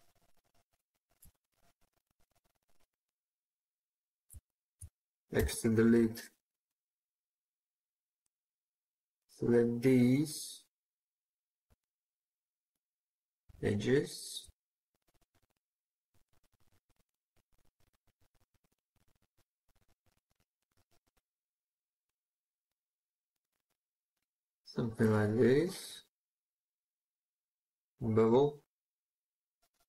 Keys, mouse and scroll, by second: 1.7 middle click, 4.3 shift+click, 5.2 x, 6.1 middle click, 11.7 shift+click, 16.0 middle click, 18.0 shift+click, 19.8 shift+click, 21.9 shift+click, 22.0 shift+click, 23.4 middle click.